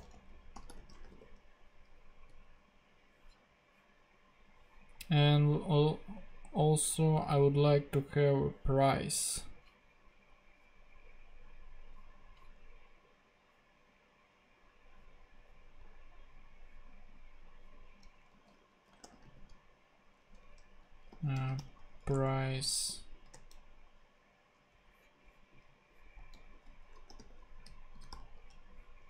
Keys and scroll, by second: 0.0-1.6 typing, 2.3 Return, 18.3 super+f, 18.8-21.4 typing, 22.1 Return, 23.3 super+f, 26.3 super+f, 26.8-27.9 typing.